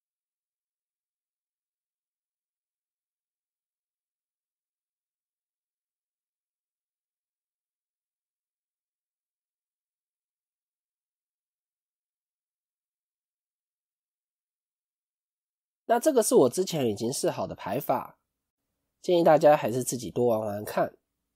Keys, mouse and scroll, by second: 11.5 KP_0, 12.6-13.0 scroll up 4, 14.2 scroll down 1.